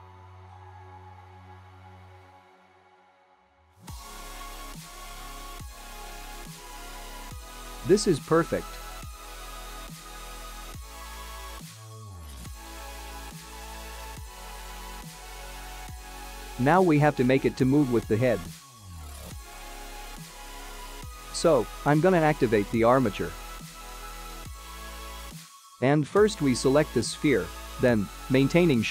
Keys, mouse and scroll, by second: 1.6 middle click, 2.8 click, 3.4 middle click, 7.9 click, 8.0 Tab, 9.2 click, 9.6 middle click, 10.9 middle click, 15.8-16.2 scroll down 3, 16.2-16.9 scroll up 2, 16.9 click, 19.3 click, 21.3 click, 22.5 click, 23.4 click, 26.0 click, 26.6 click, 27.7 g, 28.6 Escape.